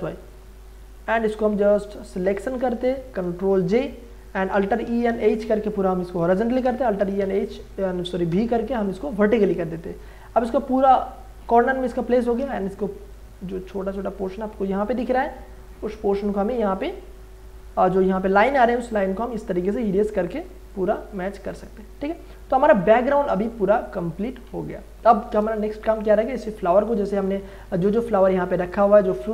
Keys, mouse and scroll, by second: 0.2 m, 1.1-3.6 drag, 3.5 ctrl+j, 4.5 ctrl+a, 4.8 alt+e, 4.9-5.9 typing, 6.6 ctrl+a, 6.9 alt+e, 7.2 a, 8.3 v, 9.9 ctrl+d, 12.4 e, 13.1 alt+right click, 18.6 click, 20.0 click, 24.7 ctrl+e, 27.5-29.3 scroll up 2.